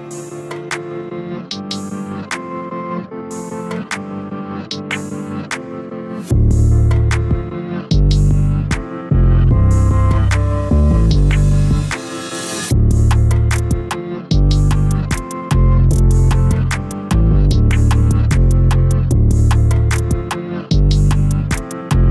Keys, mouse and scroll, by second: 2.3 a, 3.3 shift+a, 7.2 g, 10.5 click, 13.3 click, 14.2-17.2 drag, 19.8 click, 20.8 KP_0.